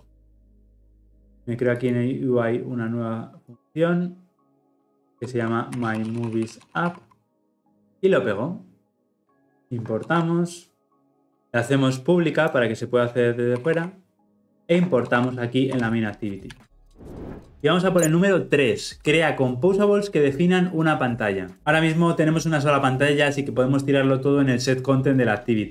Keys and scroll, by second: 7.6 ctrl+v, 10.0 alt+Return, 10.9 alt+Return, 11.1 ctrl+alt+Left, 13.5 Delete, 16.4 ctrl+alt+l, 16.6 ctrl+alt+o.